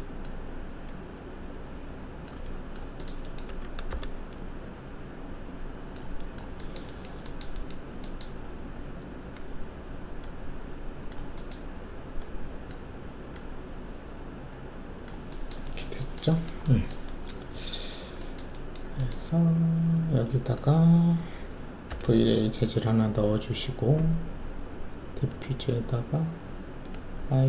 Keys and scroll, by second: 3.9 alt+r, 9.0 alt+w, 21.9 alt+shift+v.